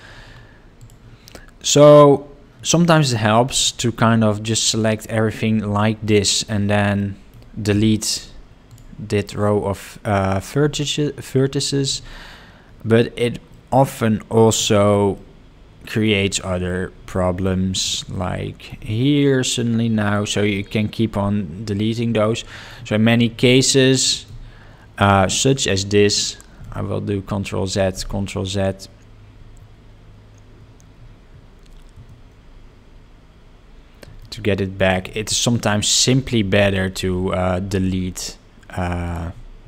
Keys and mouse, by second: 3.2 click, 5.1-6.5 shift+middle drag, 7.0 middle click, 7.7 x, 12.6 Tab, 13.5 middle click, 14.7 shift+middle click, 15.1 middle click, 16.7 shift+middle click, 17.9 ctrl+middle click, 22.2 shift+middle click, 23.5 middle click, 33.6 ctrl+z, 34.2 shift+middle click, 35.5 click, 39.0 click.